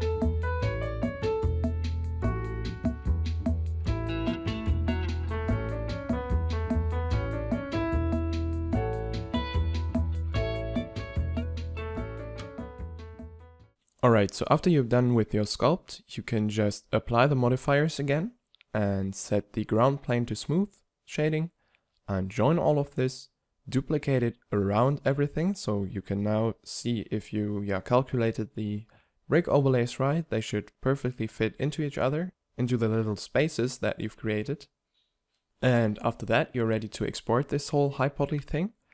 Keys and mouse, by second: 0.6 f, 2.3 f, 6.4 click, 7.5 middle click, 10.3 right click, 11.7-12.1 middle drag, 14.0-14.5 drag, 17.8 b, 18.8-19.9 drag, 19.9 ctrl+j, 20.5 t, 21.7 click, 22.3 t, 23.1 alt+g, 23.5 middle click, 25.2 shift+d, 26.4-31.9 typing, 27.7 drag, 27.9 click, 28.6 drag, 32.9 ctrl+j, 32.9 z, 33.3 t, 34.9 t.